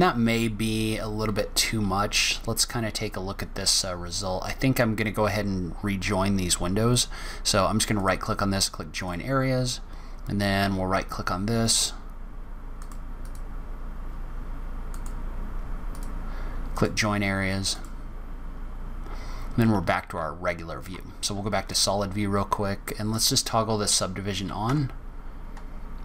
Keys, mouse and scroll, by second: 1.8-2.7 scroll down 2, 6.8 right click, 11.5 right click, 13.2 right click, 18.4 scroll down 3, 18.8 scroll up 1, 19.4 scroll up 1, 20.1 z, 21.5 scroll up 1, 23.2 click, 24.6 Tab.